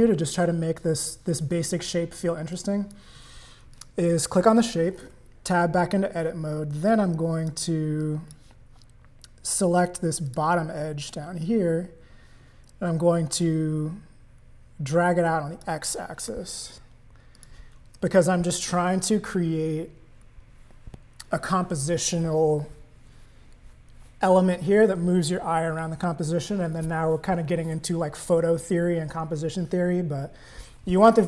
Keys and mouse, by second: 2.5 click, 3.7 click, 5.0 Tab, 7.1 click, 8.0 click, 10.3 click, 13.4-15.6 drag, 16.3 Tab, 17.4 click.